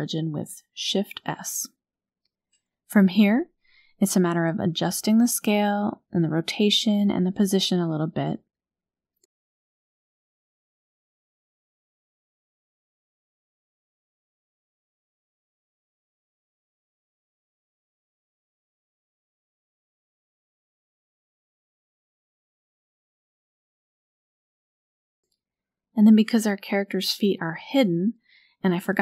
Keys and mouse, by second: 2.2-2.7 shift+drag, 3.7 shift+drag, 4.9 click, 5.4 shift+click, 6.7-7.4 shift+drag, 9.9 s, 15.6 KP_3, 16.9 r, 19.4 KP_1, 23.1 shift+drag, 23.6 shift+drag, 24.0 shift+drag, 24.4-25.5 shift+drag, 25.8 drag, 26.1-26.8 middle drag.